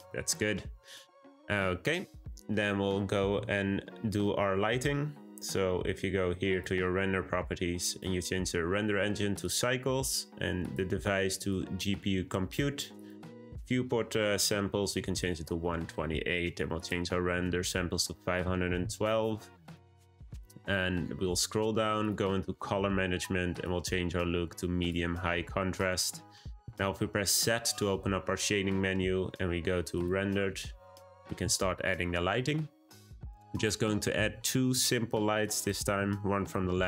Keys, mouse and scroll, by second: 6.4 click, 7.8-16.0 drag, 16.7-19.8 drag, 20.6-22.0 scroll down 12, 22.0-22.4 drag, 22.4-23.0 scroll down 5, 23.0-23.5 scroll down 3, 23.5-25.8 drag, 26.6 z.